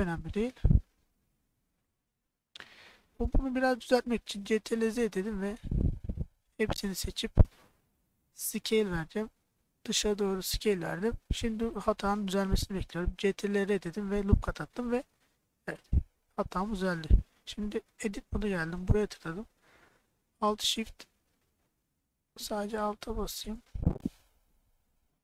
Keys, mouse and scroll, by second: 1.4 middle click, 4.8 ctrl+z, 6.6 a, 8.6 s, 10.4 click, 11.1 middle click, 12.0 click, 13.2 ctrl+r, 14.5 click, 15.2 middle click, 16.1 middle click, 17.9 3, 18.4 click, 22.8 alt+click, 23.7 click, 25.1-25.2 middle drag.